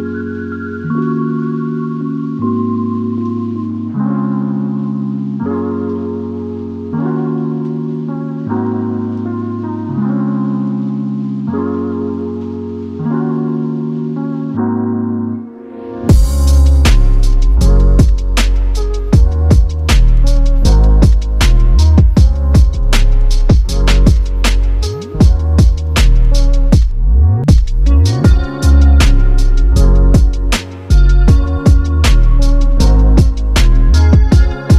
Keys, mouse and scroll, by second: 0.0 Return, 1.4 Return, 1.8-2.2 scroll down 7, 2.2-2.5 scroll up 20, 2.5-2.9 typing, 3.7 Return, 3.9-4.2 typing, 4.3-4.9 scroll up 4, 4.9-5.6 scroll down 6, 7.3 typing, 11.0 scroll up 4, 11.7-12.0 typing, 11.8 scroll down 6, 12.7-13.4 scroll down 5, 13.4 double click, 13.5 right click, 14.6 double click, 15.8 middle click, 16.1-16.4 scroll down 5, 16.4 typing, 17.5 scroll up 4, 17.6 middle click, 18.1 double click, 18.4 shift+click, 18.7 Delete, 19.0 middle click, 19.2-19.8 scroll up 5, 20.1-20.6 scroll down 9, 20.6 double click, 22.3 middle click, 22.8-23.5 scroll up 1, 23.9 double click, 25.7-26.5 scroll down 3, 27.1 middle click, 29.3 space, 29.6 middle click, 29.8 scroll down 1, 29.8 space, 30.2 middle click, 30.8 ctrl+z, 31.1 double click, 31.7 Delete, 33.2 middle click.